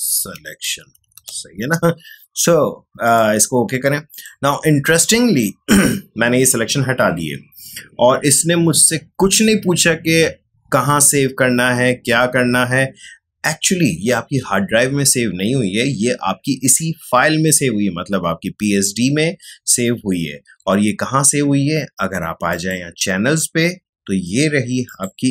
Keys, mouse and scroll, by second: 0.0-1.7 typing, 3.0 click, 22.4 click, 24.8 click.